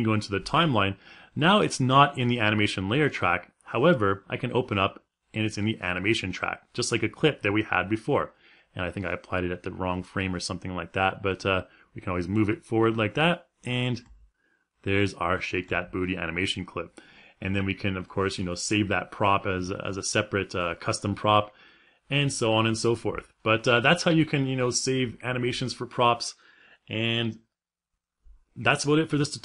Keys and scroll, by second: 13.7 space.